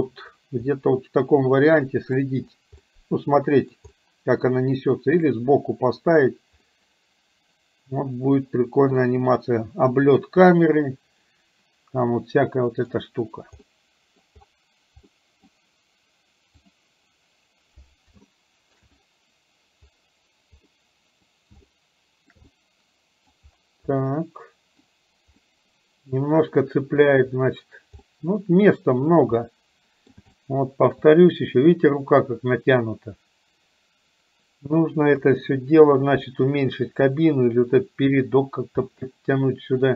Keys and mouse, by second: 0.8-2.1 middle drag, 2.9 middle click, 3.9-5.3 middle drag, 6.8-13.0 middle drag, 13.6 middle click, 15.1 middle click, 18.4 shift+middle click, 20.8 middle click, 21.8 shift+middle click, 22.5 middle click, 24.0 middle click, 25.5-26.6 middle drag, 28.0 middle click, 29.5 middle click, 30.5 shift+middle click, 35.3 KP_3, 38.9-39.9 middle drag.